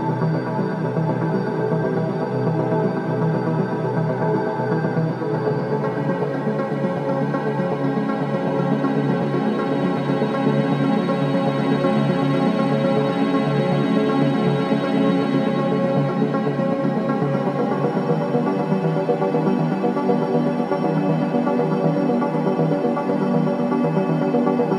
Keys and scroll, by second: 0.8 3, 1.8 ], 2.2 ctrl+z, 2.8 ], 5.6 ], 6.0 ], 7.1 4, 9.9 3, 13.4 3, 15.2 3, 17.5 ], 18.4 4, 21.8 2.